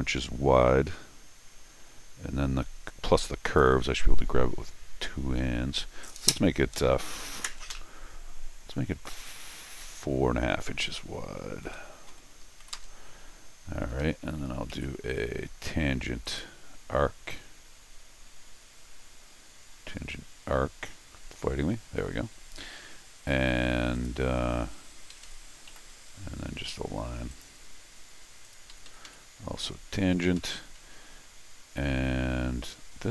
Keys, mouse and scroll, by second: 11.6 4, 12.1 ., 12.6 5, 13.8 Escape, 14.0 Escape, 14.7 alt+a, 16.2 click, 23.9 click, 25.1 Escape, 25.2 Escape, 25.7 l, 27.3 click, 28.4 click, 28.7 Escape, 28.9 Escape, 29.0 Escape, 29.6 Escape, 30.4 Escape.